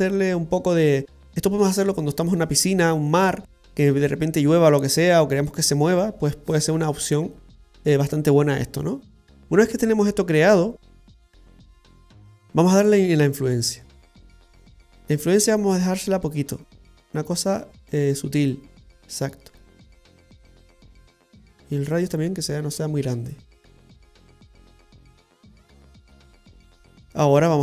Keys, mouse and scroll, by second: 9.4 middle click, 9.4-9.9 scroll down 1, 12.8 click, 21.2 click, 22.8 click.